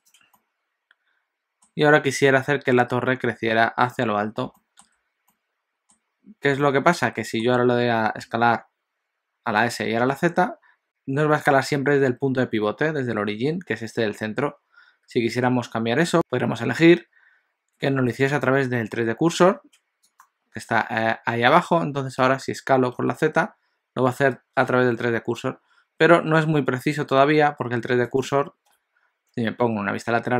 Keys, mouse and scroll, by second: 0.4 middle click, 4.6 shift+middle click, 5.4 middle click, 6.6 shift+middle click, 8.3 s, 18.6 click, 28.7 KP_1.